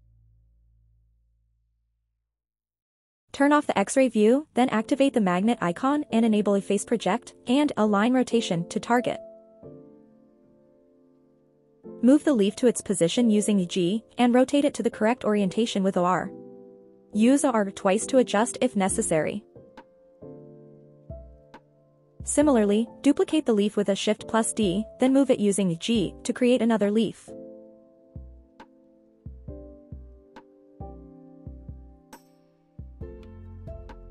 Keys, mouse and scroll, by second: 0.6 click, 0.9-1.3 scroll down 1, 1.3-1.6 shift+middle drag, 1.8 scroll down 1, 2.1 shift+middle drag, 2.6 g, 3.9 click, 4.8 shift+middle drag, 5.4-5.7 scroll up 1, 5.9 shift+middle drag, 8.4 click, 9.0 click, 12.9 g, 15.3 click, 15.8 r, 16.6 click, 17.2 r, 18.0 click, 18.4 r, 19.9 click, 20.2 scroll down 2, 20.6 shift+middle click, 20.9 scroll up 1, 21.2-21.6 shift+middle drag, 21.8 shift+d, 22.2 right click, 23.4 g, 24.7 click, 25.1 r, 25.8 click, 26.1 r, 26.2 r, 27.7 right click, 28.4 r, 28.6 r, 30.8 click, 31.6-32.4 scroll up 1, 32.4-33.1 scroll up 1, 34.0 r.